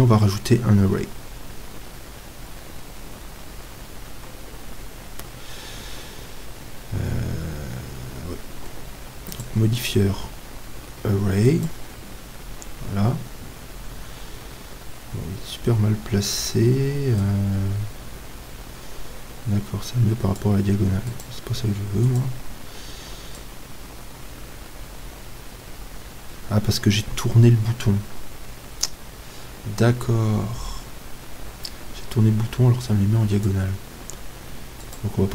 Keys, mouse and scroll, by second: 9.3-19.8 drag, 21.1-29.0 drag, 34.8-35.3 drag.